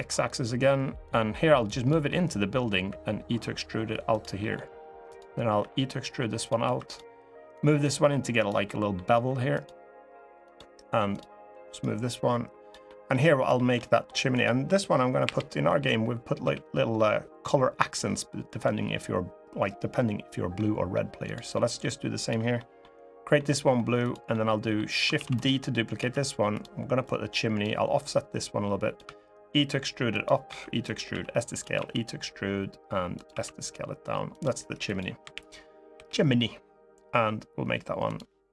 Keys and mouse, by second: 0.8 click, 1.8 middle click, 2.6 e, 3.8 click, 4.1 middle click, 5.3 e, 6.1 click, 6.4 2, 6.6 click, 7.3 click, 8.4 middle click, 9.0 3, 9.3 click, 10.8 click, 11.6 click, 12.6 middle click, 13.3 shift+middle click, 13.6 middle click, 15.0 l, 16.2 g, 18.2 click, 20.3 middle click, 21.0 click, 21.3 middle click, 22.0 click, 22.3 middle click, 23.1 middle click, 23.7 click, 24.1 middle click, 24.9 shift+d, 25.7 s, 26.2 click, 26.8 click, 27.9 click, 29.9 click, 29.9 e, 30.2 e, 30.6 click, 30.8 s, 31.3 click, 31.5 e, 32.9 click, 33.0 s, 34.0 click, 34.6 click, 34.9 l, 35.7 g, 37.8 click.